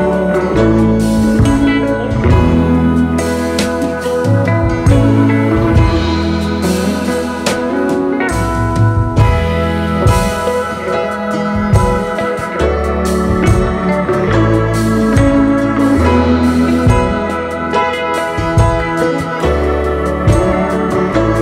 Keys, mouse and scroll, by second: 0.3-2.4 space, 3.7 space, 3.8 double click, 4.4 alt+scroll up 1, 9.0 right click, 12.4 alt+scroll down 2, 12.6 space, 13.3 alt+scroll down 1, 13.4 space, 18.2-18.9 space, 19.4-19.9 alt+scroll down 2, 19.8 space, 20.4-20.7 alt+scroll down 2, 21.2 space, 21.3 space.